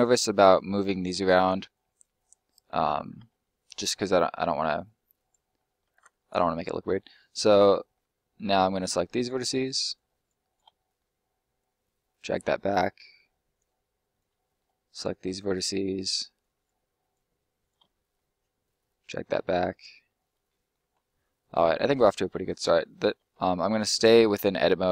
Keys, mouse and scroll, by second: 1.0 click, 2.4 middle click, 3.1 ctrl+z, 3.4 middle click, 4.6 click, 5.5 middle click, 5.9 ctrl+z, 6.2 middle click, 8.4 right click, 8.6 shift+right click, 10.8 middle click, 11.5 click, 14.1 right click, 14.3 middle click, 14.6 shift+middle click, 14.9 shift+right click, 17.9 middle click, 18.6 click, 20.0 middle click, 20.9 middle click.